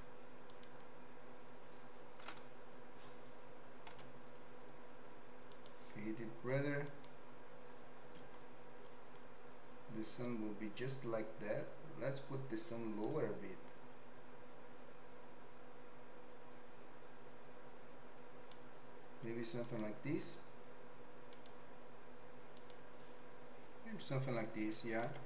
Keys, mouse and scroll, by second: 3.9 z, 6.9 click, 13.1-18.5 drag, 21.3 click, 22.5 click, 25.0 z.